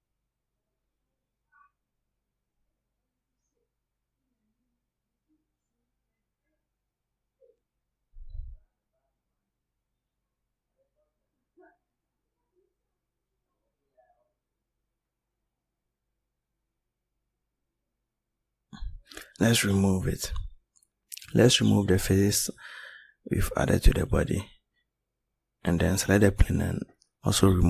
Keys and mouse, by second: 18.8 click, 23.5 right click.